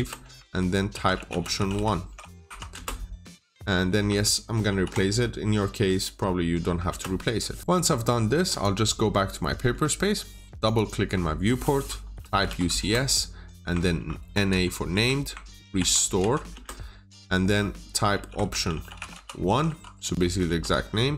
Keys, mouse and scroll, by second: 0.8-2.3 typing, 4.6 typing, 6.8 Return, 8.4 click, 9.4 middle click, 9.7-10.4 scroll down 1, 10.4 click, 10.6 double click, 12.2 typing, 12.7 Return, 13.9-14.4 typing, 14.8 Return, 16.1 typing, 16.4 Return, 18.4-19.6 typing, 20.7 Return.